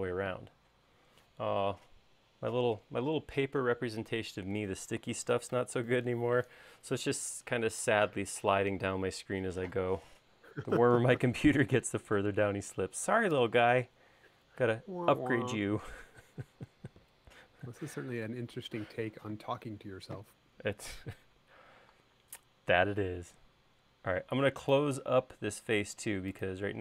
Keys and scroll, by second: 0.0 space, 23.3 l.